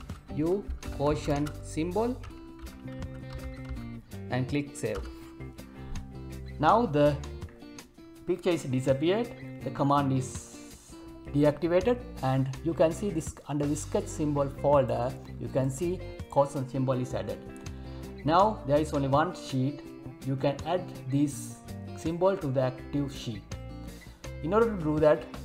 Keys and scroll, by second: 1.3 space.